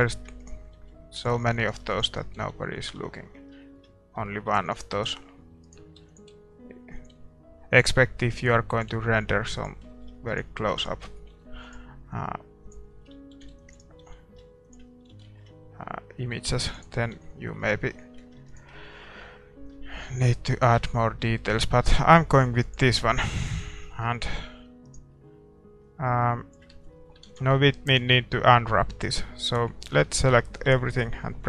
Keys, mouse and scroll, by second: 0.0-1.3 typing, 0.0-3.6 right drag, 2.4 s, 2.9 a, 3.1-6.3 middle drag, 4.7-6.3 right drag, 5.4-7.5 drag, 6.0-8.9 typing, 9.9-12.1 middle drag, 10.1 a, 10.3-12.5 right drag, 11.3 g, 12.1 s, 12.9-14.6 middle drag, 13.2 a, 13.5 ctrl+r, 14.0 s, 15.0 a, 15.2-20.4 middle drag, 16.3 ctrl+r, 17.1 a, 18.4-20.1 right drag, 19.7-21.5 drag, 20.8 Tab, 21.0-31.4 middle drag, 22.9 ctrl+s, 24.5 Tab, 24.8-26.7 right drag, 25.8-27.5 drag, 26.7 Tab, 27.5 ctrl+s, 29.9 Tab, 30.3 a, 30.7 a.